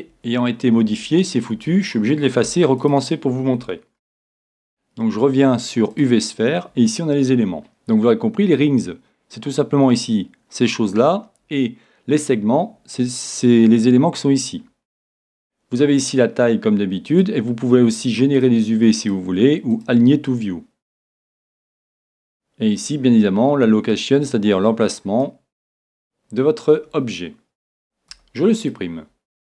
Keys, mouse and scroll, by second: 0.1 Tab, 0.9 Tab, 1.5 Tab, 2.5 x, 4.0 shift+a, 16.0-17.7 drag, 18.4-22.1 drag, 23.9-25.7 drag, 28.2 x.